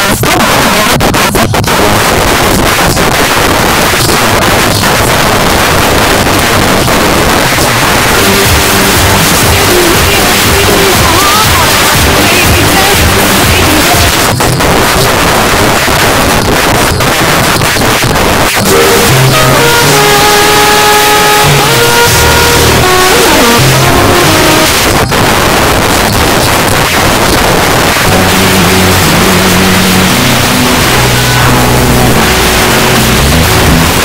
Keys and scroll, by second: 2.0-3.1 Up, 2.0 c, 3.2 Up, 3.6 Up, 3.9 Return, 14.1 Page_Down, 24.7 Page_Down.